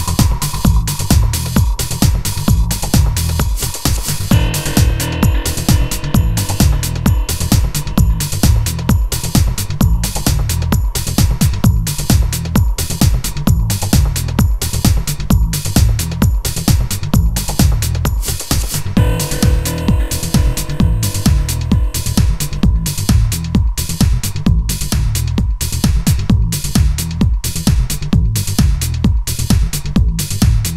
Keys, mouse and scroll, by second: 0.1 shift+a, 10.6-11.1 middle drag, 12.2-13.0 middle drag, 13.5 a, 13.8 b, 14.4 g, 23.6 0.